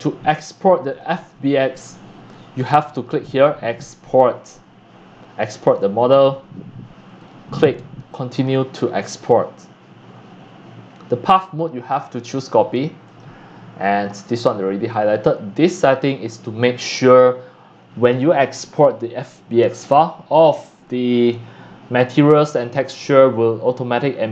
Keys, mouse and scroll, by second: 1.3-2.3 shift+middle drag, 2.3-6.1 shift+right drag, 6.1-10.8 drag, 10.8 right click, 11.5-16.6 drag, 16.6-20.8 right drag.